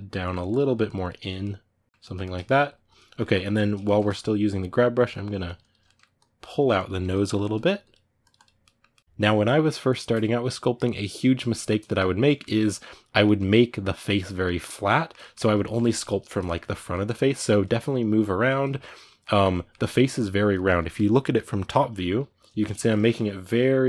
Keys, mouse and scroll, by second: 1.2-4.9 middle drag, 4.9 click, 5.6 ctrl+middle click, 5.9-7.1 drag, 7.1 ctrl+shift+middle click, 7.6 click, 8.4-21.5 middle drag, 21.5 KP_7, 22.7-23.8 ctrl+middle drag.